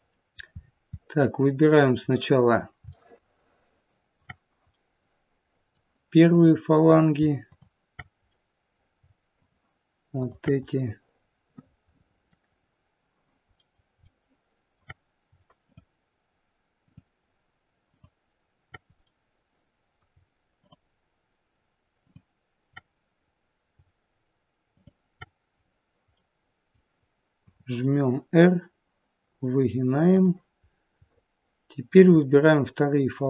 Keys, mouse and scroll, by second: 0.4-1.1 scroll up 5, 0.9 middle click, 2.1 middle click, 2.8 shift+middle click, 3.2 shift+middle click, 4.6 middle click, 6.2 click, 7.3 shift+click, 8.1 middle click, 9.3 shift+click, 10.5 shift+click, 10.6 middle click, 12.4-12.9 scroll down 1, 13.1-13.5 scroll down 1, 13.5 middle click, 13.5-13.9 scroll up 1, 13.9 shift+middle click, 15.5 shift+click, 17.1 shift+click, 18.9 shift+click, 18.9 middle click, 20.5 shift+click, 25.6-26.2 scroll down 2, 26.2 middle click, 27.4 r, 30.7-32.2 scroll up 1, 32.2 middle click, 32.2-33.2 scroll up 1.